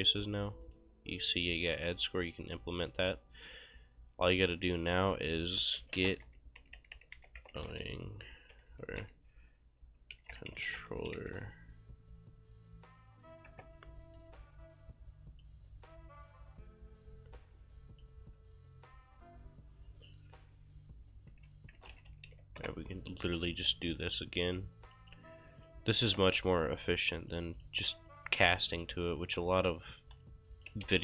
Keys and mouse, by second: 0.7 right click, 2.0 click, 2.9 right click, 5.2 right click, 5.4-11.7 typing, 8.8 ctrl+a, 13.5 Return, 14.6 click, 16.2 click, 21.1-22.8 typing, 24.1 click, 25.7 click, 26.0 shift+click, 26.3 q, 26.4 click, 29.6 click, 30.7 c.